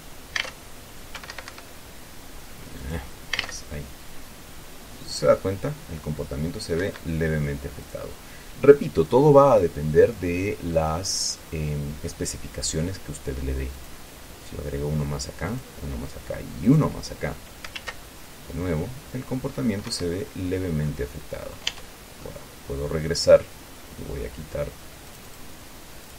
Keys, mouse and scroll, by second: 0.0 Escape, 1.5 Escape, 3.1 click, 3.7 alt+a, 7.1 Escape, 8.2 click, 9.4-11.4 drag, 11.4 middle click, 11.5-12.2 scroll up 1, 14.0 click, 15.8 click, 17.0 click, 18.0 alt+a, 20.2 Escape, 21.2 click, 22.0 Tab, 22.5-24.2 drag, 25.4 click.